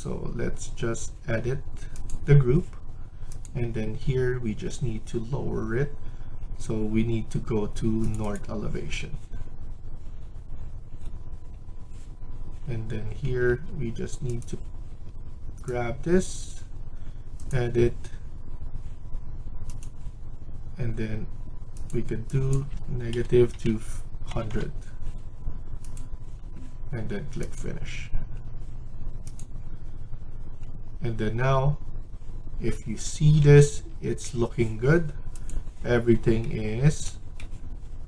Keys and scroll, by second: 13.1 Escape, 13.3 Escape, 15.0 Escape, 23.0-24.2 typing, 33.3 Escape, 33.7 Escape.